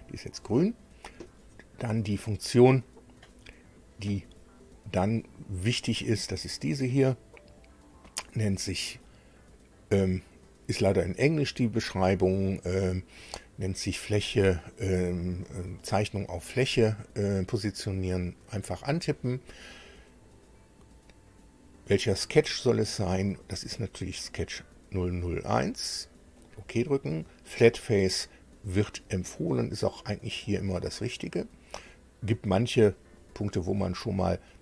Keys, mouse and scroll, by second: 18.6 click, 23.0 click, 24.3 click, 26.4 click, 29.5 click, 30.6 click.